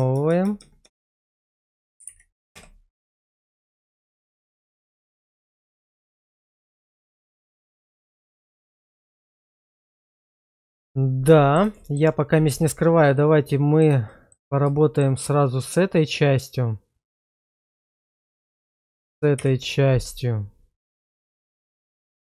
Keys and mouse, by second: 0.0-0.8 typing, 4.2 middle click, 4.9 middle click, 6.0 /, 7.2 middle click, 9.4 shift+middle click, 10.8 middle click, 11.8 shift+middle drag, 13.0 middle click, 14.1 shift+middle drag, 14.8 shift+middle click, 18.3 shift+click, 19.4 /.